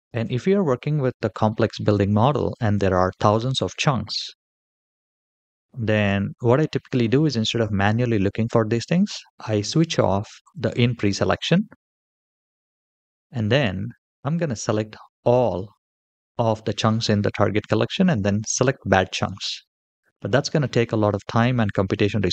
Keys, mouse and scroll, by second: 0.6-1.1 middle drag, 2.1-2.6 shift+middle drag, 10.2 click, 14.1 shift+middle click, 14.1-15.4 scroll down 2, 22.1-22.3 scroll up 2.